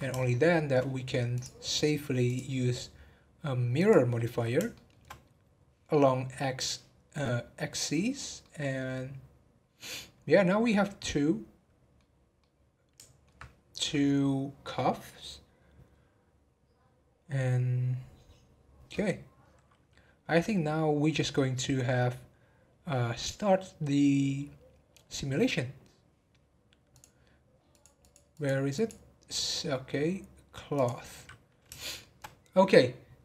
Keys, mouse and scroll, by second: 1.3 click, 3.9-4.7 drag, 4.7-7.8 shift+middle drag, 8.4-11.5 middle drag, 12.4-15.5 middle drag, 20.6-23.7 middle drag, 26.9 click, 28.0 click, 28.3 click, 28.7 click, 30.7-31.8 drag, 31.8-33.2 shift+middle drag.